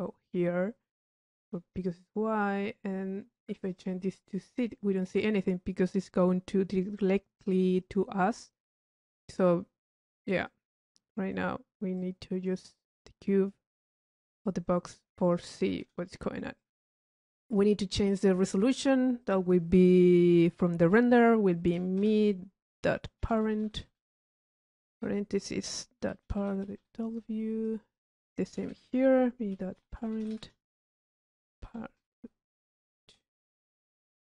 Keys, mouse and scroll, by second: 1.4-1.9 drag, 3.7 click, 8.6 click, 12.0-13.5 drag, 14.0 middle click, 14.5 click, 15.3 click, 15.7 click, 16.6 click, 17.0 middle click, 17.5 click, 18.4 click, 19.5 click, 27.7 click, 34.0 middle click.